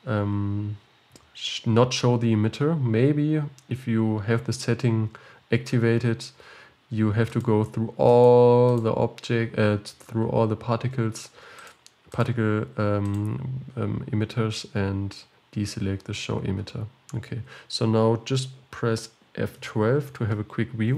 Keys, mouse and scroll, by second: 7.5 click, 8.7 click, 11.6 click, 13.2 click, 16.7-19.7 scroll down 6.